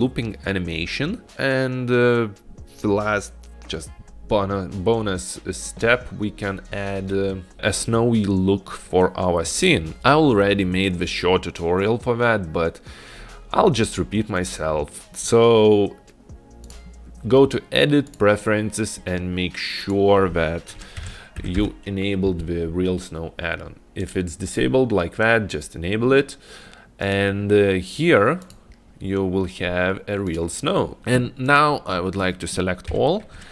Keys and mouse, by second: 16.8-18.4 drag, 28.5 click, 30.4 click, 31.5 click.